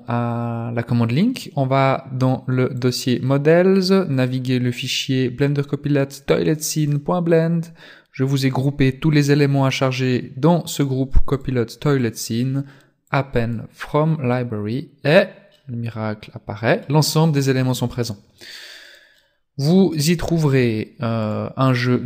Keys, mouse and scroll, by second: 13.6 click, 14.5-15.5 scroll down 9, 15.5 middle click, 17.1 scroll down 1, 17.2-17.7 scroll up 5, 17.7-18.5 scroll down 3, 19.1 middle click, 20.1 shift+middle click, 20.7 shift+scroll up 1, 21.3 right click, 21.8 right click.